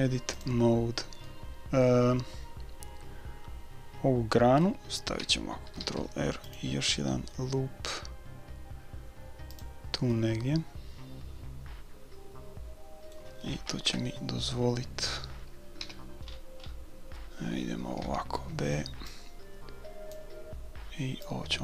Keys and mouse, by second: 1.3-3.3 middle drag, 5.8 ctrl+r, 10.2-11.8 middle drag, 13.9 KP_3, 15.8 a, 16.3-18.5 middle drag, 18.5 b, 19.0-21.6 drag.